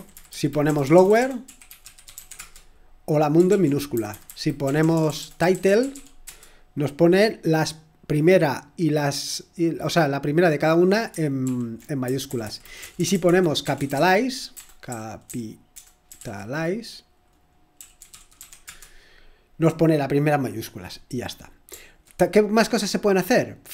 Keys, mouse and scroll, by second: 0.0-2.8 typing, 3.5 Return, 3.9 ctrl+p, 4.1 Left, 4.2 Left, 4.6 Left, 4.6-6.7 typing, 9.0 typing, 11.4 ctrl+p, 12.0 Left, 12.2 Left, 12.4 Left, 12.8-18.8 typing.